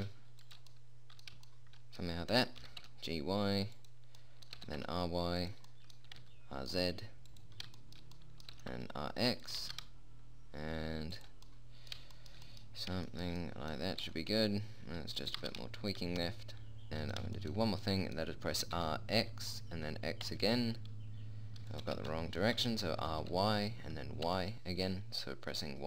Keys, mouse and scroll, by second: 0.2 g, 3.0 g, 5.0 r, 6.5 r, 8.9 r, 10.0 g, 14.4 r, 15.7 g, 19.1 r, 22.3 ctrl+z, 23.3 r.